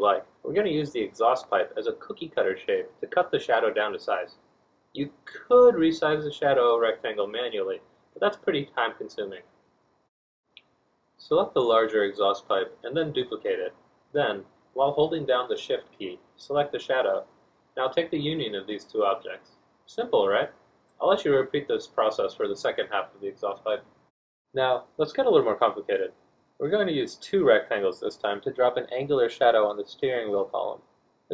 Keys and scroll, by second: 0.0 d, 2.7 r, 10.8 F1, 11.4 F1, 20.0 r, 21.6 d, 22.7 Escape, 27.2 r, 28.8 F1.